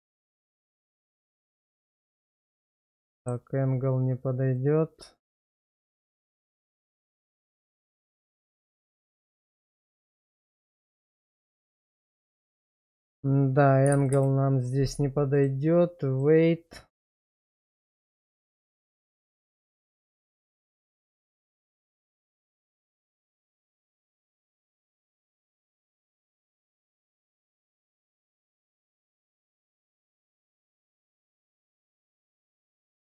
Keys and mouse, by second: 0.9-1.7 drag, 2.6-3.3 middle drag, 12.5-14.1 drag, 15.3 click, 17.5 shift+middle drag, 18.1-20.9 middle drag, 21.1 shift+middle click, 23.3 click, 23.8 click, 24.2 click, 25.5 click, 27.3 shift+middle click, 27.8 middle click, 30.4 click, 31.7 click, 32.4 click, 32.8 click.